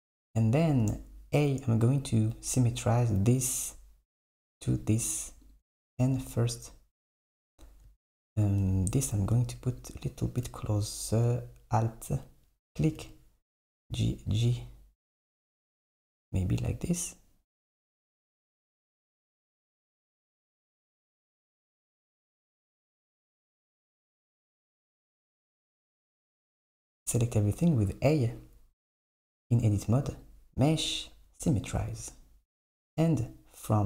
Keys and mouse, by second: 0.9 a, 5.5 click, 7.5 KP_7, 9.7 click, 10.6 alt+click, 12.9 g, 15.6 Tab, 16.2 Tab, 18.9 click, 19.2 alt+click, 20.4 g, 23.3 Tab, 25.4 Tab, 26.4 a, 30.2-33.8 drag.